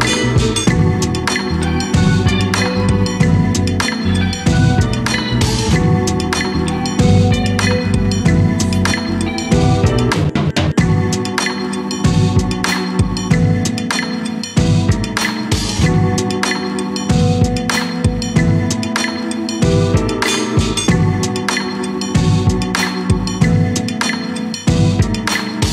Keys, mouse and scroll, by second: 1.0 shift+s, 2.2 shift+a, 5.6-6.6 scroll down 3, 6.6 r, 10.1 s, 13.2 g, 16.1 s, 17.4 g, 18.4-18.8 scroll up 1, 18.8-20.2 middle drag, 20.2-20.5 scroll up 1, 20.5 Tab, 21.1 Tab, 22.7-23.7 middle drag, 23.7 Tab, 24.6 2, 25.4 3, 25.6 click.